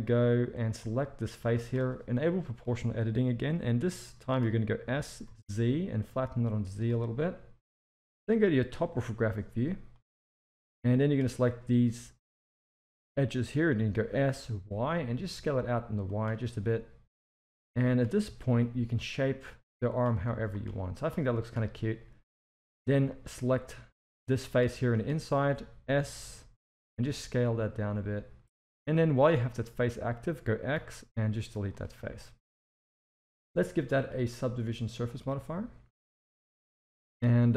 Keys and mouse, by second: 0.6 click, 2.5 click, 3.5-4.2 middle drag, 4.8 s, 8.4 KP_7, 9.9 click, 13.9 s, 17.5 click, 18.2 s, 20.2 z, 21.5 KP_1, 22.3 z, 23.1 shift+middle drag, 23.7-24.4 drag, 24.7-25.0 shift+middle drag, 26.2 s, 28.9-29.3 middle drag, 30.7 x, 32.7 KP_1, 34.0-35.2 drag, 36.0 z, 36.8 shift+middle click.